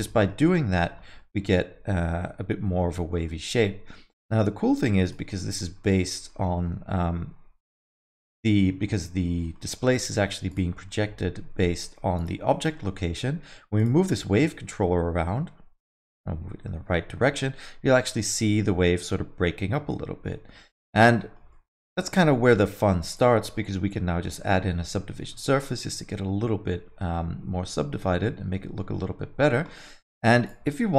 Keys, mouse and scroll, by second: 0.0 alt+middle click, 0.4 alt+middle click, 0.7 middle click, 1.0 scroll up 2, 1.1 alt+middle click, 2.6 middle click, 2.8 scroll down 4, 3.1 alt+middle click, 5.0 click, 5.3 alt+middle click, 5.5 scroll down 2, 5.8 middle click, 6.1 middle click, 6.9 g, 9.4 middle click, 9.7 scroll up 3, 9.9 alt+middle click, 10.5 click, 10.7 middle click, 12.1 click, 12.5 middle click, 12.8 middle click, 13.8 click, 14.1 middle click, 14.6 g, 20.9 alt+middle click, 21.2 middle click, 21.5 alt+middle click, 23.1 click, 23.4 middle click, 24.1 ctrl+1, 24.4 middle click, 24.7 alt+middle click, 24.9 middle click, 25.2 alt+middle click, 27.4 scroll up 3, 27.6 alt+middle click, 29.1-29.6 scroll down 6, 29.7 alt+middle click, 30.4 click.